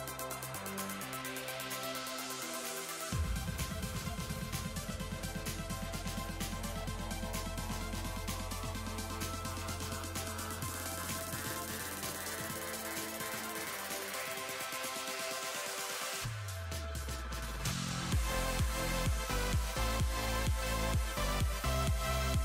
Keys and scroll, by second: 1.7 s, 5.3 s, 6.2 s, 8.4 s, 9.1 s, 9.5 s, 11.5 s, 12.2 s.